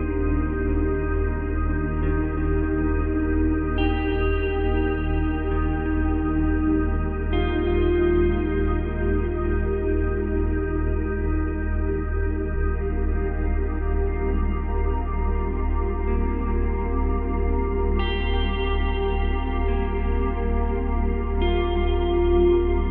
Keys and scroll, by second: 1.0 space, 2.8 space, 3.9 space, 5.2 space, 8.4 space, 9.4 space, 12.5 space, 18.0 space, 21.0 space.